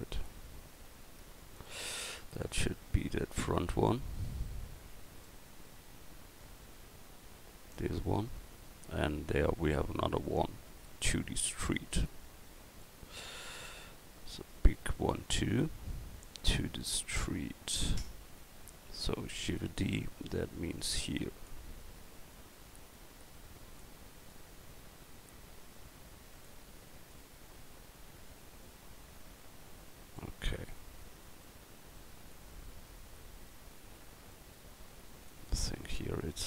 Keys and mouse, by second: 19.5 shift+d, 20.2 click, 33.2 middle click, 35.3-36.4 right drag.